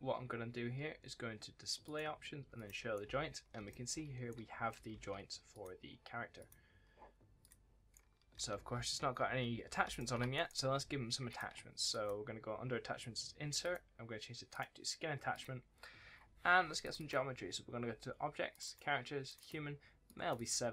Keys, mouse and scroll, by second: 1.7 click, 2.8 right click, 2.9 a, 3.1-3.4 scroll up 1, 3.4 scroll down 1, 3.6 s, 4.2 right click, 4.3 w, 4.3-4.8 scroll up 1, 4.8 s, 5.4 click, 7.8-9.7 typing, 7.8 right click, 8.4 scroll up 1, 9.1-9.4 scroll down 1, 9.4 scroll up 1, 9.7 scroll down 1, 10.2 right click, 11.2 click.